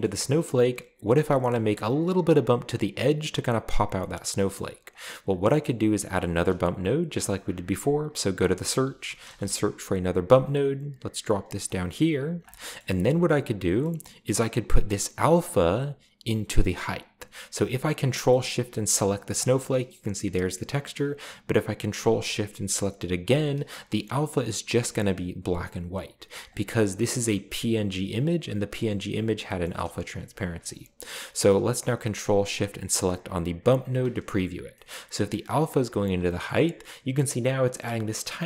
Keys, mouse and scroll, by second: 0.0 shift+middle click, 4.3 middle click, 4.9 click, 5.6 scroll up 1, 6.5 scroll up 1, 7.5 shift+a, 8.4 click, 8.6-9.3 typing, 10.3 click, 11.3 click, 12.1-13.1 drag, 12.6-13.7 middle drag, 13.8-14.9 middle drag, 16.2-17.5 drag, 17.9 drag, 18.5 middle click, 19.4 ctrl+shift+click, 23.3 ctrl+shift+click, 23.9-24.4 scroll down 1, 24.4-24.8 scroll up 1, 26.5 click, 27.2 click, 29.7 middle click, 30.4 middle click, 33.6 ctrl+shift+click, 34.5 drag, 34.9-35.5 scroll up 2, 34.9-35.5 middle drag, 36.5-37.2 shift+middle drag, 36.5-37.2 shift+scroll up 2.